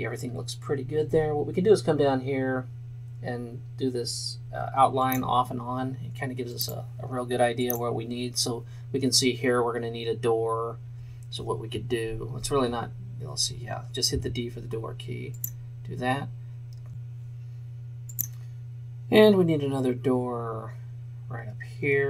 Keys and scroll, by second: 14.3 d.